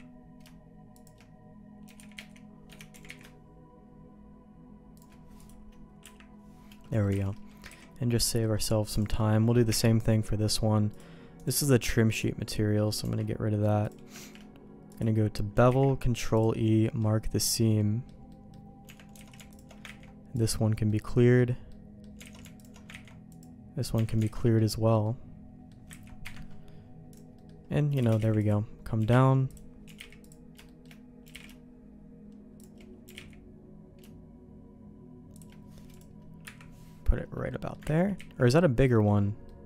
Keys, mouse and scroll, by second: 1.9 g, 2.9 g, 5.4 click, 6.0 Delete, 6.9 middle click, 7.1 alt+a, 7.3 click, 7.4 middle click, 7.7 ctrl+s, 8.3 middle click, 9.7 KP_Divide, 10.9 click, 11.4 click, 12.7 middle click, 13.1 Tab, 13.8 click, 14.2 shift+g, 15.7 ctrl+e, 16.8 middle click, 17.8 middle click, 18.3 middle click, 18.9 Tab, 19.2 alt+a, 19.9 ctrl+e, 20.9 middle click, 21.7 middle click, 22.2 alt+a, 23.1 ctrl+e, 23.9 Tab, 24.2 alt+a, 24.4 middle click, 25.0 middle click, 25.9 ctrl+s, 26.3 KP_Divide, 27.4 middle click, 28.0 shift+d, 29.0 g, 29.9 g, 30.7 shift+middle click, 31.2 g, 33.1 g, 35.9 click, 37.5 middle click, 39.2 ctrl+z.